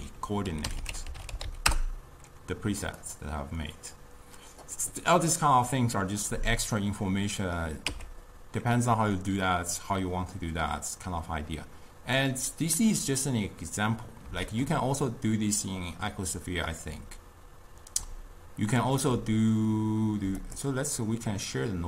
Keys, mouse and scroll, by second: 0.8 o, 6.9 click, 7.9 x, 9.1-12.1 middle drag, 14.5 shift+a.